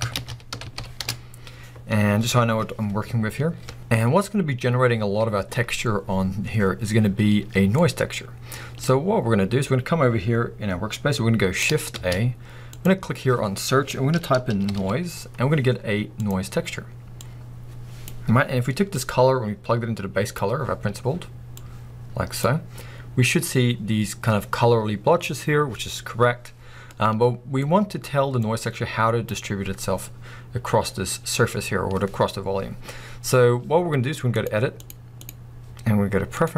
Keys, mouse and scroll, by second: 1.0 Return, 1.0-16.2 drag, 16.2 middle click, 17.2-36.5 drag.